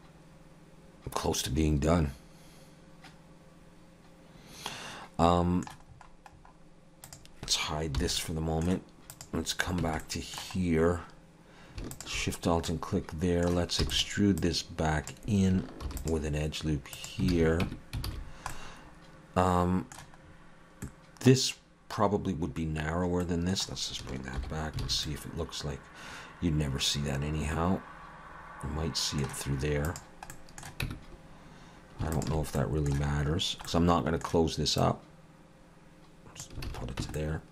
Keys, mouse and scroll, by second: 5.9-7.1 scroll up 4, 7.1 click, 8.0 h, 8.2 middle click, 9.1 click, 9.8 Tab, 10.0 middle click, 10.6-11.0 scroll up 2, 11.9 alt+shift+click, 12.7 middle click, 13.8 e, 14.4 click, 15.8 ctrl+r, 17.3 alt+a, 17.6 Tab, 18.1 alt+a, 18.3-19.0 scroll down 2, 18.5 middle click, 20.3-20.7 scroll up 2, 20.8 middle click, 23.2 middle click, 24.4 alt+h, 24.8 alt+a, 25.1 middle click, 29.9 click, 30.3 middle click, 30.9 Tab, 32.1 alt+shift+click, 32.6 middle click, 33.7 middle click, 34.8 click, 36.7 alt+a, 37.0 Tab, 37.2 middle click.